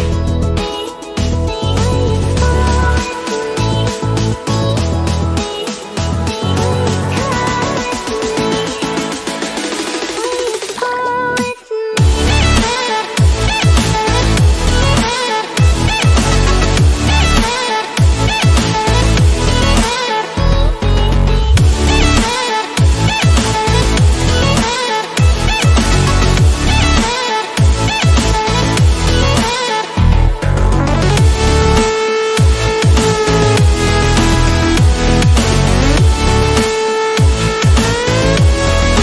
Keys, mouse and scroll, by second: 15.3-21.2 drag, 21.6 click, 21.7 click, 21.8-25.0 drag, 25.0 alt+scroll up 1, 25.4 scroll down 1, 25.6 click, 26.7 scroll down 1, 27.0-33.9 drag, 34.1 click, 38.8 click.